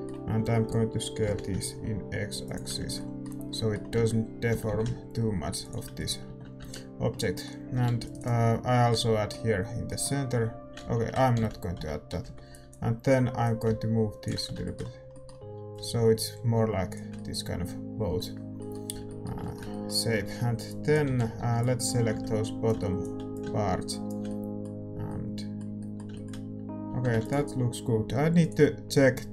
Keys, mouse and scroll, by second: 1.4 s, 2.8 Tab, 4.5 Tab, 4.5 s, 6.2 Tab, 7.8 ctrl+r, 10.8 ctrl+z, 11.7 z, 11.7 a, 12.6 b, 13.4-15.1 drag, 14.3 z, 14.6-22.6 middle drag, 15.7-20.9 drag, 20.9-22.6 typing, 22.6-25.0 drag, 24.2-26.8 middle drag, 24.9 a, 26.8 Tab.